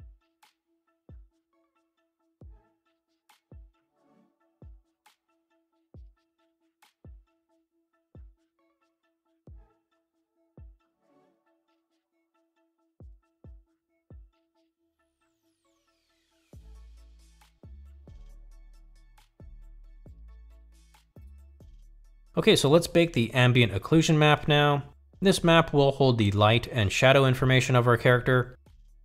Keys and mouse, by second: 6.5 click, 7.0 middle drag, 7.2-9.4 drag, 9.5-11.2 drag, 11.9 middle click, 12.2 middle click, 12.4 middle click, 12.5 middle click, 12.7 middle click, 13.5-14.9 drag, 15.1-16.6 drag, 16.8 middle drag, 17.0-19.6 drag, 19.7-20.1 drag, 20.2-20.8 drag, 21.7 middle click, 22.2 middle click, 23.0 middle drag, 23.4 middle click, 23.7 middle click, 23.9 middle click, 24.2 middle click, 27.5-29.0 drag.